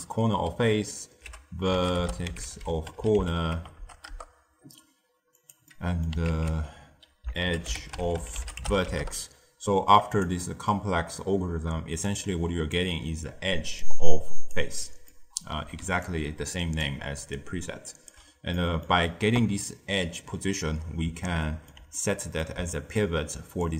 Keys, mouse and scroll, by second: 3.7 BackSpace, 5.6 middle click, 6.2 ctrl+a, 10.3-11.7 middle drag, 11.7 d, 12.0-12.7 drag, 12.7-13.5 d, 13.8-14.5 drag, 14.5 d, 15.0-15.8 middle drag, 15.8 d, 16.0-16.8 drag, 16.8 d, 17.3-18.0 right drag, 18.0 d, 18.5-23.3 middle drag, 23.3 d, 23.5 click.